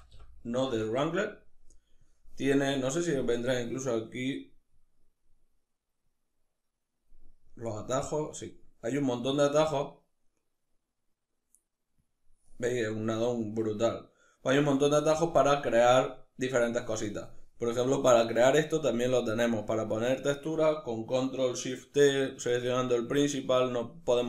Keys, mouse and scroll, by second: 18.4 right drag, 18.7 right click.